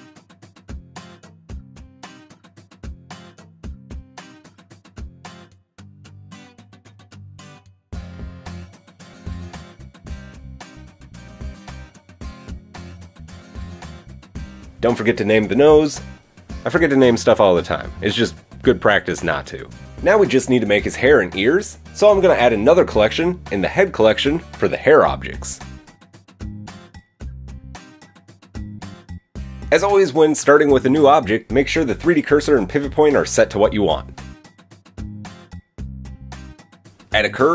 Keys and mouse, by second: 1.2 click, 2.1 click, 2.2 middle click, 2.5 click, 2.5-10.6 middle drag, 8.2 KP_1, 12.3-13.5 middle drag, 13.5 click, 13.7-15.1 shift+middle drag, 15.1 click, 15.2 middle click, 15.3-22.6 drag, 24.4 click, 30.5 shift+s, 33.1 KP_3, 33.4 KP_1, 36.1 middle click, 37.2 shift+a.